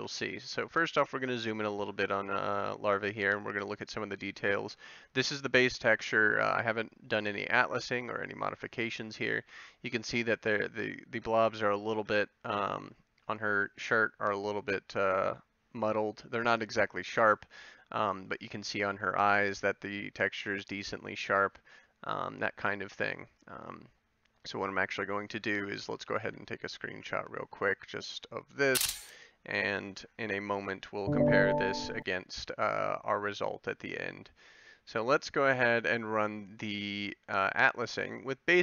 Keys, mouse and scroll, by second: 0.7 middle click, 1.5 middle click.